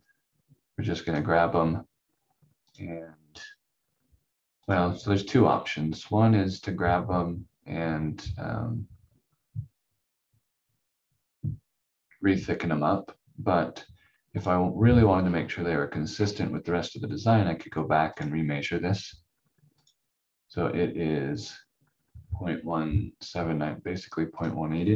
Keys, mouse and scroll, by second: 1.0 click, 5.4 scroll down 1, 12.2-13.2 scroll up 1, 14.4 click, 15.2-15.5 scroll down 1, 16.1-18.1 scroll up 1, 18.1 click.